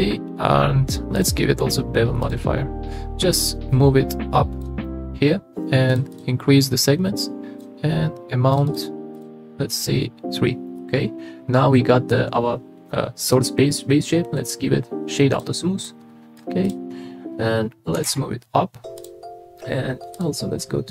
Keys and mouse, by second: 1.1 click, 3.7-4.7 drag, 6.1 click, 7.2 click, 8.7 click, 9.2 click, 10.8-11.9 middle drag, 13.3-15.4 drag, 15.9-16.4 middle drag, 16.6 middle click, 17.9 g, 18.0 z, 20.2-20.9 drag.